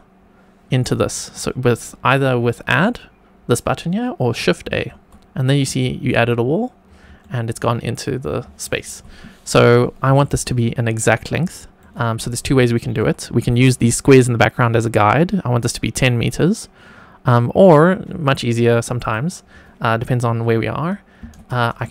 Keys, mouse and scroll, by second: 4.6 shift+a, 5.7 shift+middle click, 6.8 scroll up 1, 7.1-7.5 shift+middle drag, 8.1-8.6 scroll down 2, 8.6 shift+middle click, 10.1-10.6 shift+middle drag, 11.1-11.7 shift+middle drag, 12.6 shift+middle click, 19.0-21.9 drag.